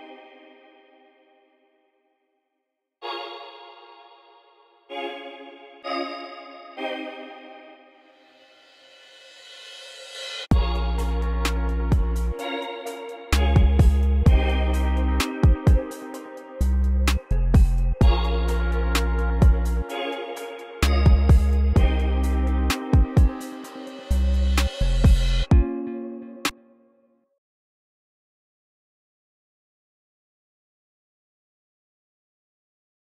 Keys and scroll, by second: 2.2 v, 15.6 v, 17.0 v, 21.2 v, 22.2 x, 26.1 space, 26.9 s, 28.3 space, 30.7 s.